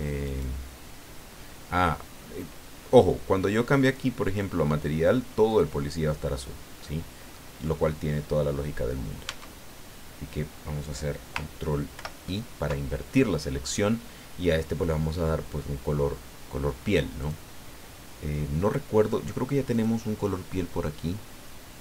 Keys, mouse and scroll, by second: 0.2 right click, 2.0 scroll down 1, 3.8 right click, 5.5 right click, 6.8 middle click, 7.6 scroll up 1, 8.2 scroll down 1, 9.3 Tab, 11.9 ctrl+i, 17.2 click, 19.7 click.